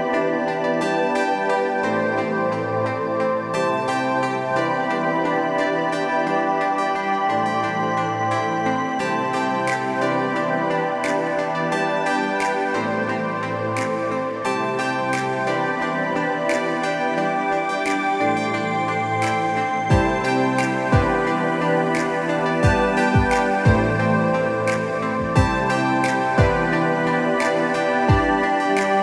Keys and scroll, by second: 13.8 ctrl+a, 13.9 ctrl+c, 14.0 ctrl+w, 14.6 ctrl+v, 15.2 ctrl+alt+shift+t, 18.8 ctrl+Return, 19.5 space, 25.8 space, 26.3 ctrl+space, 26.4 ctrl+i, 26.9 b.